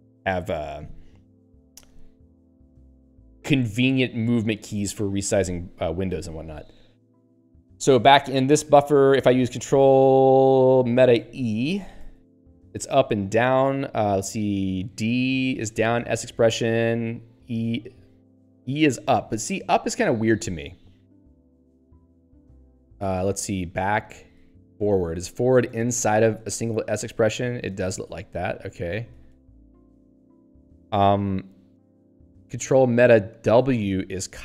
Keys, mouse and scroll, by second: 7.7 Return, 11.2 ctrl+alt+e, 14.9 ctrl+alt+d, 17.3 ctrl+alt+e, 21.6 ctrl+alt+b, 24.2 ctrl+alt+f, 27.9 ctrl+alt+b, 33.5 ctrl+alt+w.